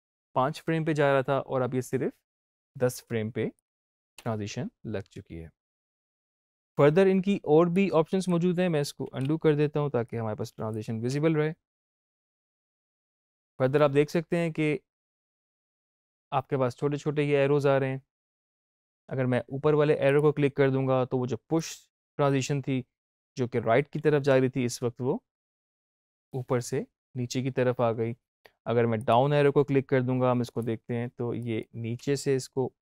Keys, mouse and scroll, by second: 3.5 click, 4.1 space, 7.6 click, 8.9 ctrl+z, 10.0 click, 11.0 space, 12.9 click, 20.0-24.2 drag, 24.2 space, 28.9 click, 31.9 space.